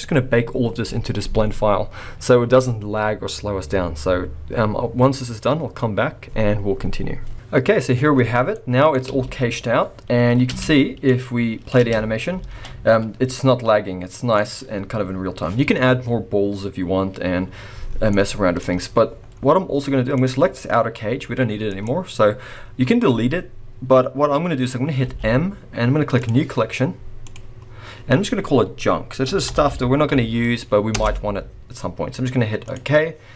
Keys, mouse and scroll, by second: 8.5 middle click, 9.1 space, 9.9-10.5 scroll down 1, 10.5 space, 11.1 click, 11.8 space, 12.5 alt+a, 12.8-13.3 scroll up 2, 13.3 middle click, 18.1 middle click, 19.2-20.1 scroll down 2, 20.1 click, 20.1-21.0 scroll down 1, 21.0 g, 22.2-23.2 scroll up 2, 25.0 m.